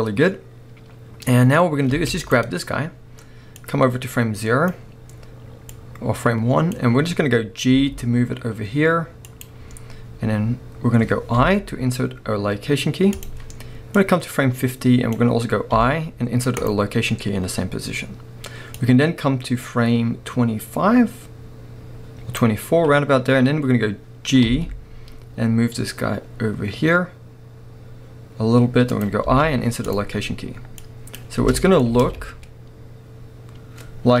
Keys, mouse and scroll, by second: 1.9 space, 2.2-9.4 drag, 7.1-7.7 scroll up 1, 7.7 g, 11.4 typing, 14.0-29.1 drag, 15.7 typing, 23.5-24.5 scroll down 2, 24.5 g, 29.3 typing, 30.8-31.9 drag, 31.4 space, 31.9-34.2 middle drag.